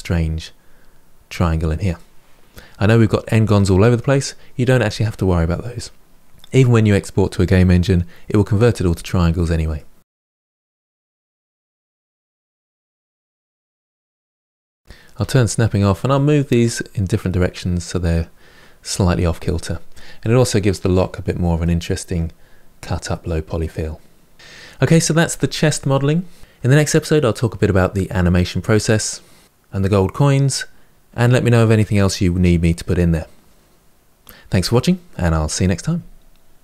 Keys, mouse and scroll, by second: 1.8-6.2 middle drag, 9.3 middle click, 10.2 Tab, 10.3-10.7 scroll down 3, 10.4 middle click, 10.7 middle click, 11.5 Tab, 11.6 scroll up 1, 11.7 middle click, 11.8 click, 11.9 middle click, 12.0 g, 12.2 middle click, 12.4 click, 12.6 ctrl+b, 12.8 click, 12.9 scroll up 1, 13.0 shift+middle click, 13.0 g, 13.4 middle click, 13.5 click, 13.6 g, 14.0 middle click, 14.1 click, 14.3 g, 14.7 click, 15.0 g, 16.0 middle click, 16.3 Tab, 19.6-20.0 scroll down 1, 20.0-26.4 middle drag.